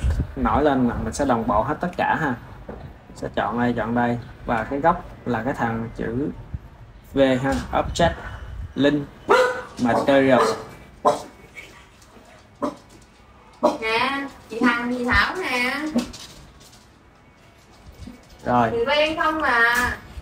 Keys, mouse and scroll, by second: 1.3 click, 1.9 shift+drag, 2.8 shift+drag, 3.3 shift+drag, 3.8 shift+click, 7.5-10.6 drag, 17.1 click, 18.3-20.2 ctrl+middle drag.